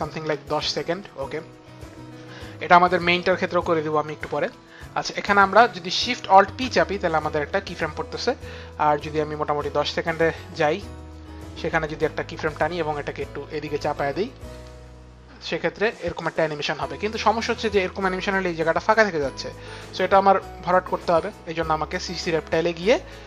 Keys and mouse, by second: 0.0-0.9 typing, 0.9 Return, 4.9 click, 6.1 click, 6.5 alt+shift+p, 6.5 click, 9.0 click, 13.4 shift+click.